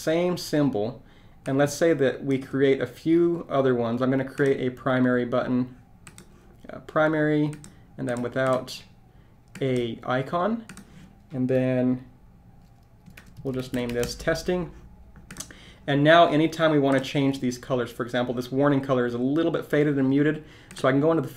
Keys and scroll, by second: 13.0-13.9 typing.